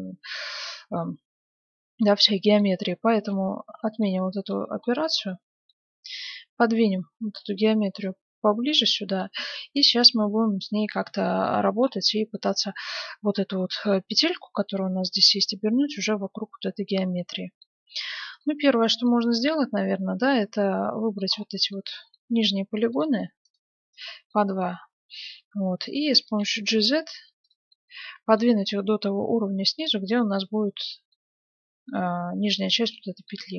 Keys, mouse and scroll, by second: 3.6 ctrl+z, 6.2-7.9 drag, 8.0-9.8 drag, 9.4-11.1 middle drag, 11.3-17.2 middle drag, 17.9 ctrl+Tab, 19.0 middle click, 20.5 middle click, 21.4-23.3 middle drag, 22.4-25.5 right drag, 24.3-26.1 middle drag, 26.2 g, 27.7-29.4 middle drag, 28.5 g, 30.1-31.8 scroll down 1, 31.8-32.5 scroll up 1, 32.5 scroll down 1, 32.7-33.5 middle drag.